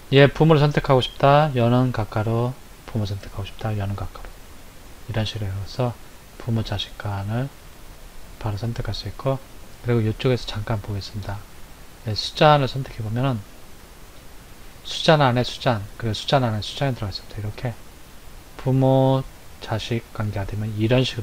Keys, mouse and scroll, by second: 2.0 [, 3.7 [, 6.2 click, 12.8 click, 14.2 click, 17.4 click, 18.4 click, 19.5 click.